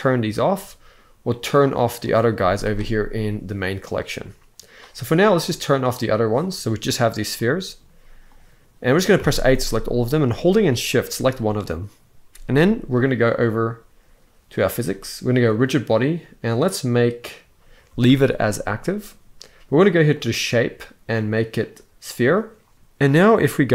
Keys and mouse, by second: 0.0 click, 1.7 click, 2.1 z, 5.4 click, 7.1 middle click, 8.0 click, 8.9 a, 9.4 middle click, 14.3 click, 15.2 click, 19.9 click, 20.4-22.0 drag, 22.7 ctrl+l.